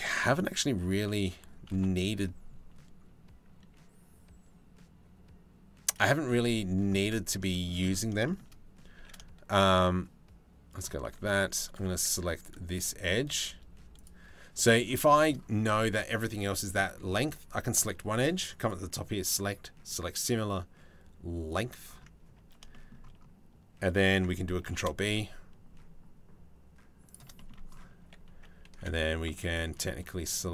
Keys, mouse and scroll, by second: 6.7 middle click, 7.1 shift+middle click, 8.6 e, 11.8 2, 12.3 click, 13.6 click, 14.8-16.6 shift+middle drag, 24.2 ctrl+b, 27.0 click, 27.6 3, 28.4 2, 29.2 alt+click, 30.2 alt+shift+click.